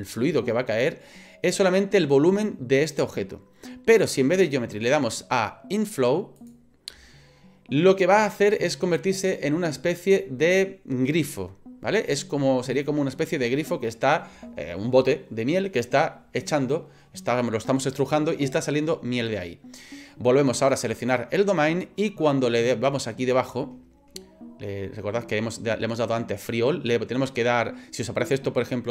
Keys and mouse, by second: 4.5-6.5 drag, 21.0 right click.